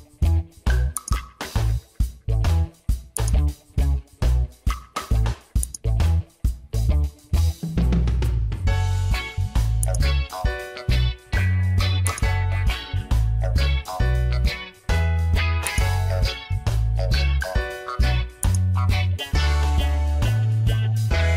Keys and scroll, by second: 11.1 Return.